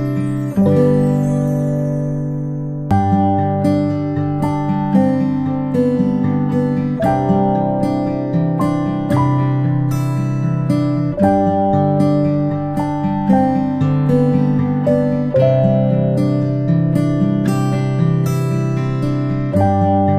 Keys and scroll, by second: 10.0 ctrl+shift+[, 10.6 ctrl+], 11.0 ctrl+shift+[, 11.1 ctrl+shift+[.